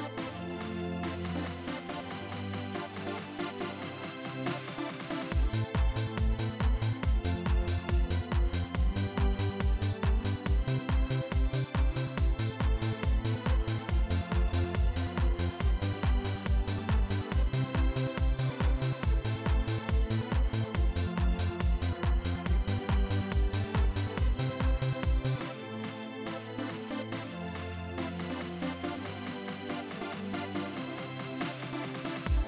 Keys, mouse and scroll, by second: 2.1 click, 3.5-4.9 drag, 8.6-10.4 drag, 11.0 click, 11.9-12.7 drag, 13.6 click, 15.3-17.8 drag, 19.0-20.2 drag, 21.0 click, 22.5-23.4 drag, 25.1 click, 32.3-32.4 drag.